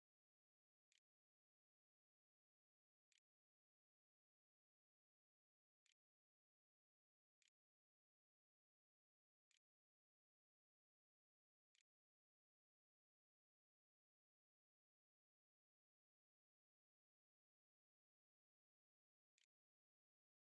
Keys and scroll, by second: 0.0-13.3 typing, 9.3 Tab, 16.5-20.4 typing.